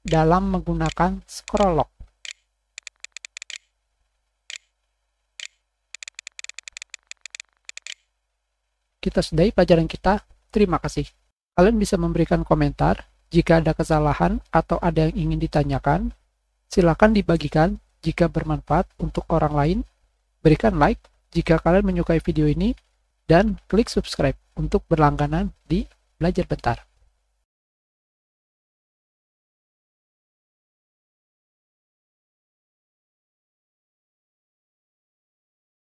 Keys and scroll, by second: 0.7 Up, 2.2 Right, 4.4 Scroll_Lock, 4.7 Print, 4.7 Right, 5.0 Down.